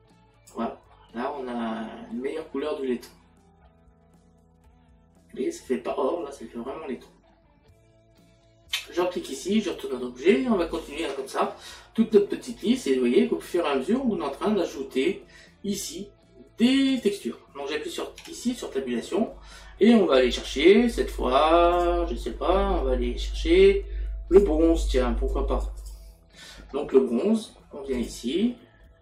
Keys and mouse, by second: 8.7 click, 24.3 click.